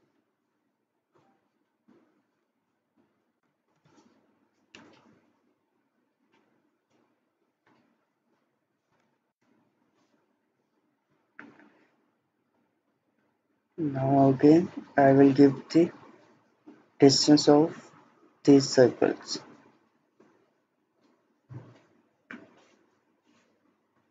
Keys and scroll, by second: 3.2-4.0 typing, 8.9 typing, 9.3 Return, 12.9 Escape.